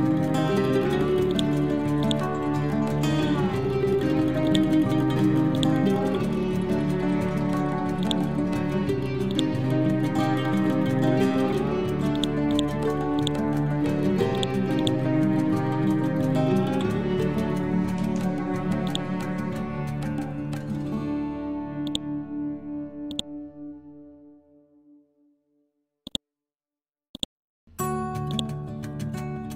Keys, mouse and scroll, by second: 2.4 scroll down 1, 4.5 click, 4.5-8.1 drag, 9.3 right click, 10.4 ctrl+End, 12.2 click, 14.4 right click, 15.5-16.4 scroll up 1, 17.2 scroll down 1, 18.9 click, 19.4-20.1 scroll up 1, 21.9-26.1 drag.